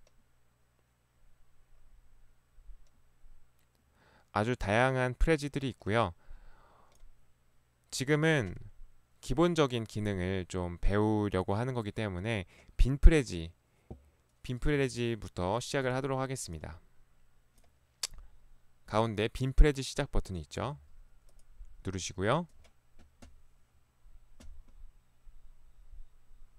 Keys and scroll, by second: 15.9 ctrl+1, 20.7 Escape.